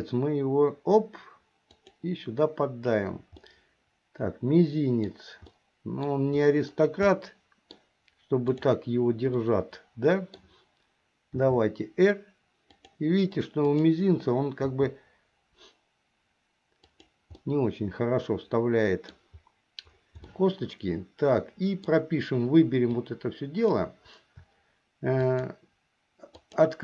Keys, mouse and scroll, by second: 3.5-5.3 middle drag, 5.7 middle click, 7.3 middle click, 8.7 click, 9.5-10.6 middle drag, 11.5 r, 13.8 click, 14.8 r, 17.6-19.2 middle drag, 20.4-22.0 middle drag, 23.1 click, 25.2 shift+click, 26.4 shift+click.